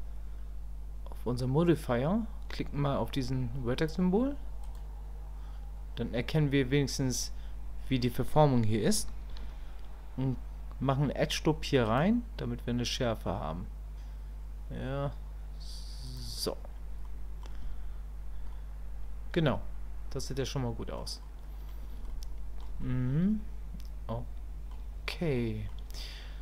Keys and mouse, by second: 4.7 click, 17.1 middle click, 18.5-21.0 middle drag, 21.2 middle click, 22.1 shift+click, 22.8-24.7 middle drag, 25.4 middle click.